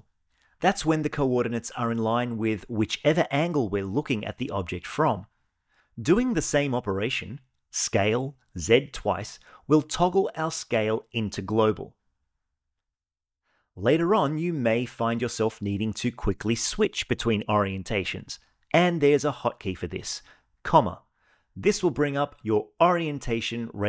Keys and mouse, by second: 0.0 click, 1.4-3.8 middle drag, 4.1-4.6 shift+middle drag, 4.9-7.0 middle drag, 7.3 s, 8.2 z, 9.2 z, 20.8 '.